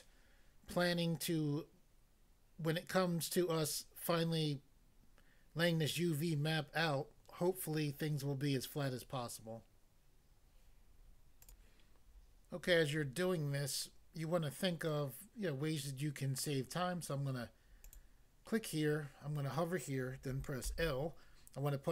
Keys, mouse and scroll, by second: 11.4 click, 11.6 click, 17.8 click, 17.9 click, 20.7 l.